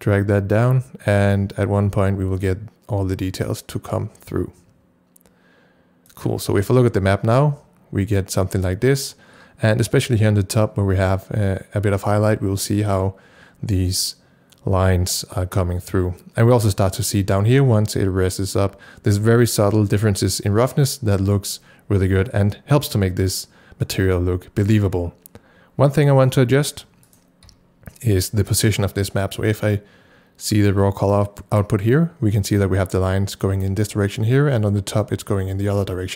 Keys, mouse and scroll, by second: 6.6 c, 27.5 c, 31.0 click.